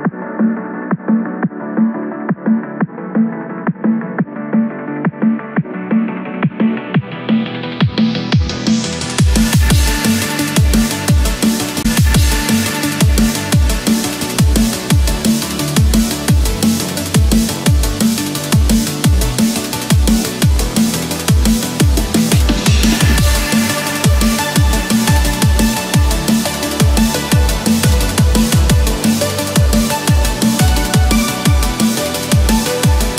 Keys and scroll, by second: 11.7 ctrl+=, 12.3 ctrl+=, 17.6 ctrl+-, 17.9 ctrl+0, 32.9 ctrl+=.